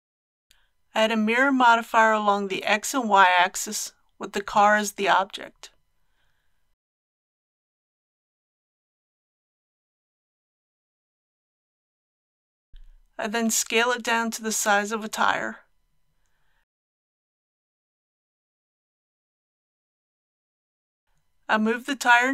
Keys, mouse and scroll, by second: 0.2 ctrl+z, 0.5-2.9 drag, 12.7 ctrl+z, 13.6 s, 14.5 x, 19.3 click, 20.8 g.